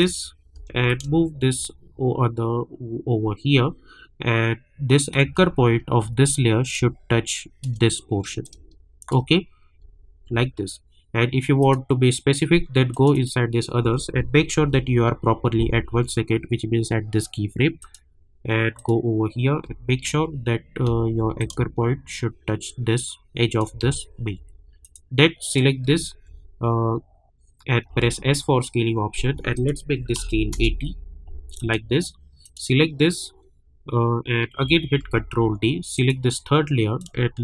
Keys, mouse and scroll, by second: 0.5 v, 1.1-5.3 shift+drag, 5.6-6.6 alt+scroll up 2, 7.0-7.8 shift+drag, 8.4-9.9 drag, 9.9-10.3 alt+scroll down 1, 11.6 click, 14.5 j, 17.8 click, 19.9-20.3 alt+scroll up 1, 21.2 alt+scroll up 1, 21.7-24.4 shift+drag, 24.4-24.8 alt+scroll down 1, 26.0 alt+scroll down 1, 27.9 s, 29.5 click, 30.5 Return, 31.5 click, 35.0 ctrl+d, 35.9-37.4 drag, 37.3 shift+click.